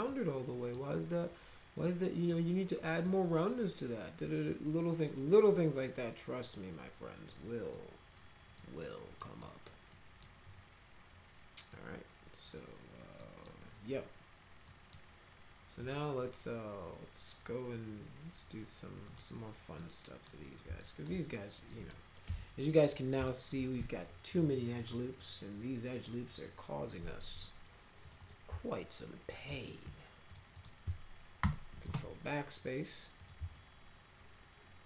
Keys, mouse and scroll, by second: 0.0 middle click, 1.8 middle click, 3.0 middle click, 4.5 middle click, 5.5-7.3 middle drag, 7.7 middle click, 8.6 middle click, 9.4 middle click, 9.9 middle click, 11.7 middle click, 13.2 middle click, 14.7 middle click, 15.8 click, 19.1 click, 19.8 middle click, 20.8 alt+middle click, 21.7 middle click, 22.2 F4, 23.3 alt+middle click, 24.8 click, 28.0 click, 28.2 click, 28.8 alt+middle click, 29.5 middle click, 30.3 ctrl+click, 30.5 ctrl+click, 31.4 ctrl+BackSpace, 33.2 click, 33.5-34.8 alt+middle drag.